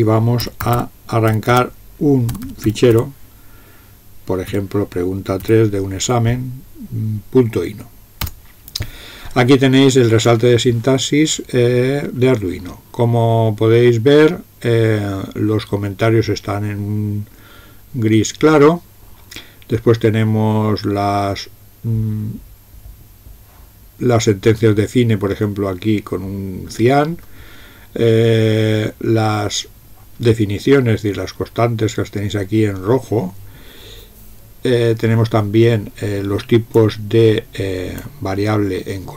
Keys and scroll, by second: 0.2-3.5 typing, 4.5 typing, 5.4 Tab, 8.2 Return.